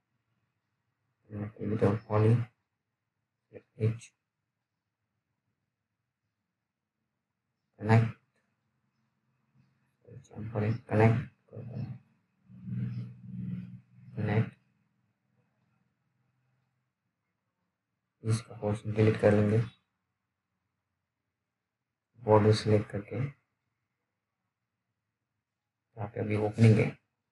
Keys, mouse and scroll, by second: 1.3 click, 10.8 click, 18.5 Delete, 19.9 alt+middle click, 20.4-20.8 alt+scroll up 1, 22.3 middle click, 23.0-23.4 scroll down 1, 23.5 alt+middle click, 25.6 F3, 26.1-26.8 scroll up 1.